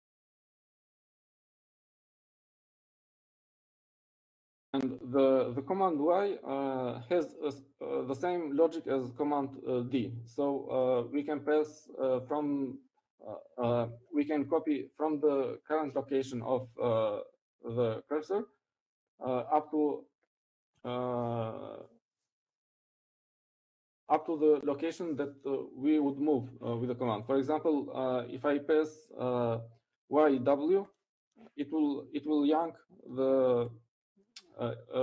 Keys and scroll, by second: 0.3 p, 2.4 u, 14.1 Up, 14.4 Up, 18.4 Up, 19.1 Right, 19.3 Right, 19.8 Right.